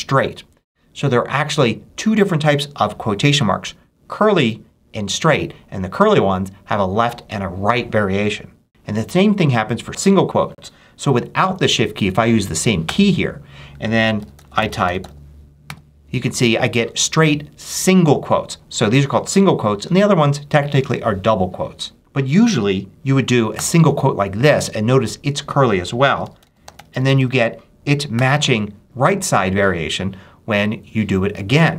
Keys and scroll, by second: 12.7-15.5 typing, 23.4 ▮, 25.7-28.0 typing.